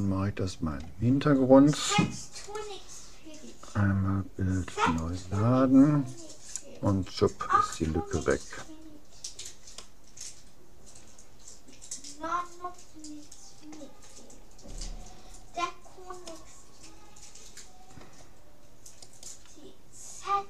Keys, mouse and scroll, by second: 2.5-4.3 drag, 9.1-11.6 middle drag, 14.3-16.3 middle drag, 17.7 middle click, 19.1-20.4 right drag, 20.1 middle click.